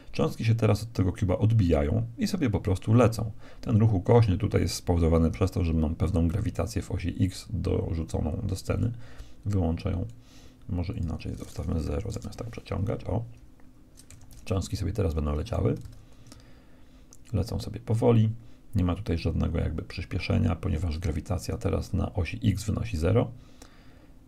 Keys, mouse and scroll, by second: 8.8-12.6 drag, 14.0 Escape, 15.4-17.0 right drag, 15.8 alt+a.